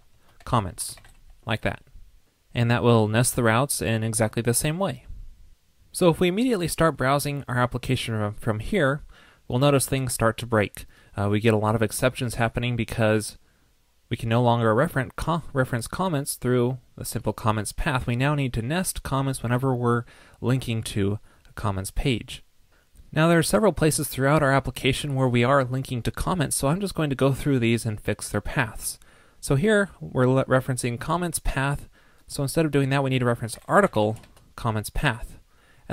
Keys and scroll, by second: 1.6 super+s.